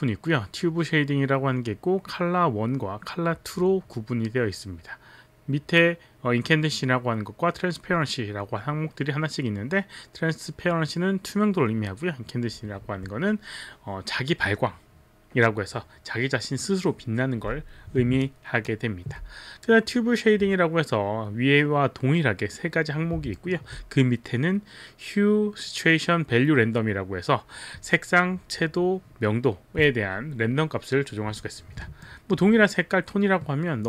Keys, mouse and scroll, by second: 18.3 alt+click, 23.4 alt+middle click, 32.0 alt+middle click.